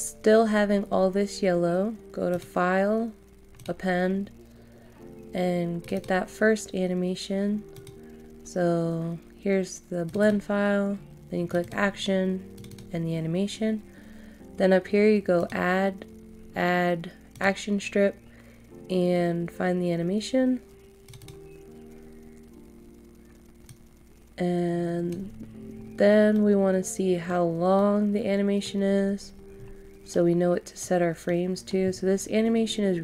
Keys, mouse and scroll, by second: 25.4 scroll down 1, 26.3 middle click, 28.8 scroll down 1, 30.1 middle click, 31.9 scroll up 1.